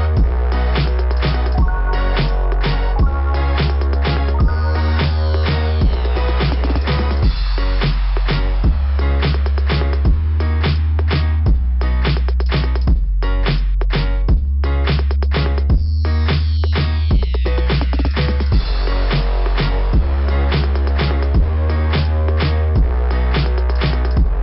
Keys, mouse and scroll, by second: 1.3 click, 2.3 scroll down 2, 4.7 click, 6.4 click, 7.2 click, 8.4 click, 9.7 click, 10.6 click, 11.1 scroll up 2, 14.1-14.4 scroll down 2, 14.8-15.2 scroll down 3, 18.7 click.